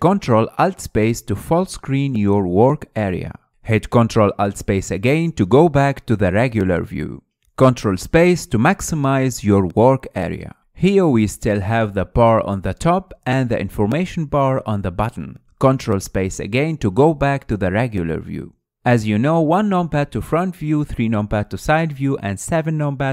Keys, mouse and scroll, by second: 1.9 ctrl+alt+space, 5.1 ctrl+alt+space, 6.6-7.8 drag, 7.8-9.1 middle drag, 9.1 ctrl+space, 10.0-17.2 middle drag, 17.2 ctrl+space, 17.9-20.5 middle drag, 20.5 KP_1, 21.5 KP_3, 22.9 KP_7.